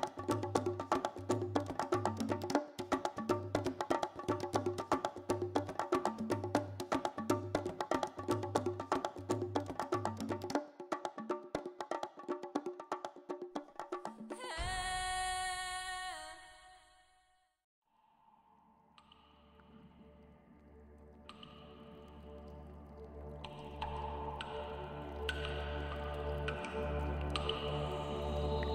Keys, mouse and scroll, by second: 0.1 b, 1.0 shift+middle click, 1.1 scroll up 4, 1.5 middle click, 2.0 shift+middle click, 2.8 click, 3.3 g, 4.0 right click, 4.4 click, 4.8 middle click, 5.5 g, 6.0 right click, 6.3 shift+middle click, 6.9 click, 7.2 shift+click, 7.5 w, 12.8 scroll up 4, 13.0 middle click, 13.9 click, 14.3 shift+click, 15.0 w, 16.1 shift+middle click, 16.8 click, 17.4 KP_7, 17.8-18.2 scroll down 7, 18.3 shift+middle click, 18.6 scroll up 3, 19.1 g, 20.6 click, 20.8 middle click, 21.4 shift+middle click, 21.6 middle click, 23.8 right click, 24.0 click, 24.4 g, 25.3 right click, 25.6 click, 25.8 click, 26.2 click, 26.4 click, 26.6 click, 27.3 scroll up 5, 28.0 click, 28.3 shift+click.